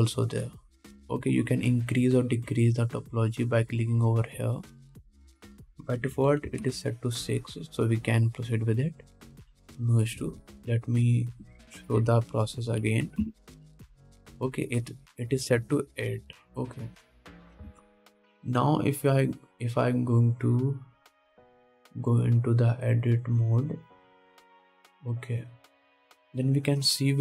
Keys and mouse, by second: 9.8 middle click, 11.6 ctrl+z, 13.2 F3, 17.1-21.0 middle drag, 18.9 ctrl+Tab, 21.0 click, 21.9 middle click, 22.1-24.8 drag, 24.8-26.8 middle drag, 26.8 click.